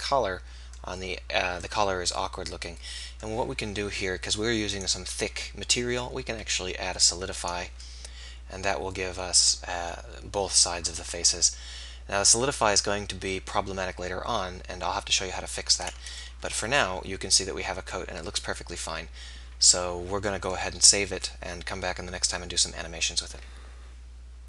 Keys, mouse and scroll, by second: 4.7-6.5 drag, 12.0-24.4 middle drag.